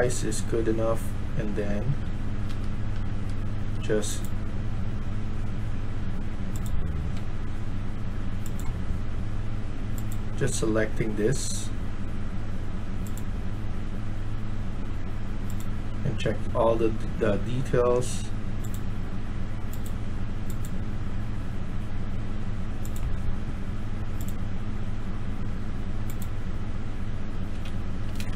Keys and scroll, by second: 1.9-2.4 typing, 27.2-27.6 typing, 28.2 Escape.